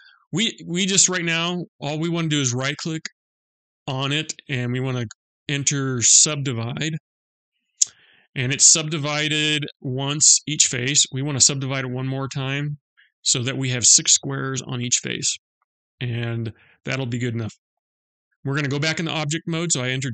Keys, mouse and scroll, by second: 3.4 right click, 12.1 click, 17.2 Tab.